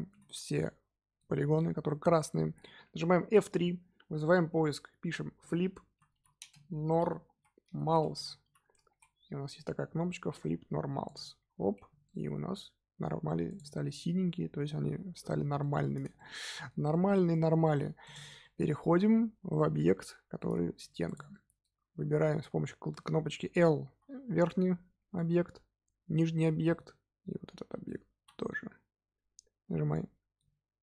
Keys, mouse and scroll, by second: 0.1 a, 0.6-3.4 middle drag, 3.4 F3, 11.8 Tab, 12.0-13.4 middle drag, 13.4 click, 13.8-18.0 middle drag, 18.0 click, 18.4-20.7 middle drag, 20.7 Tab, 21.0 click, 21.3-23.8 middle drag, 23.8 l, 24.4 middle click, 25.3 scroll up 2, 26.0 l, 26.4-28.1 middle drag, 28.1 l, 28.4-30.8 middle drag.